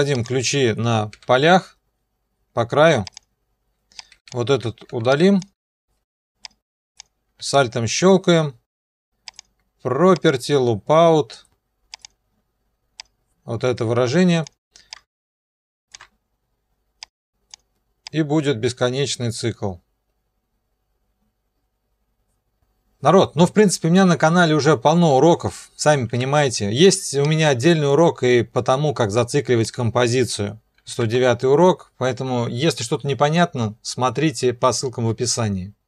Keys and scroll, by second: 1.1 o, 4.9 Delete, 5.5 Delete, 26.2 ctrl+2, 30.9 ctrl+2.